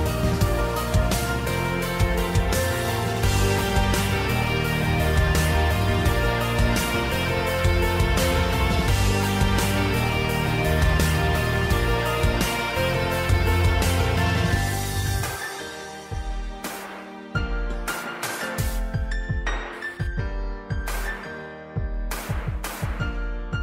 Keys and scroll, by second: 2.2-5.9 typing, 7.8 typing, 9.3 super+z, 14.5-15.4 typing, 17.1 super+-, 17.7 typing, 21.1 typing.